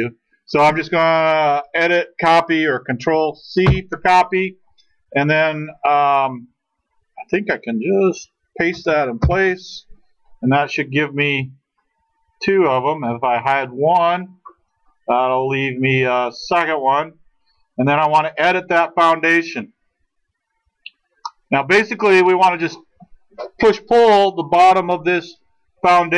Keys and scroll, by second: 3.6 ctrl+c.